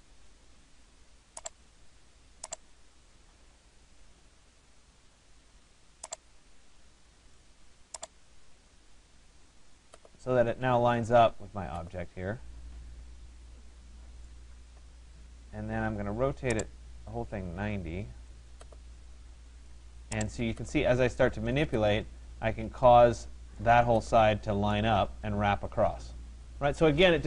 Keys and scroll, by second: 2.7 5, 3.6 Return.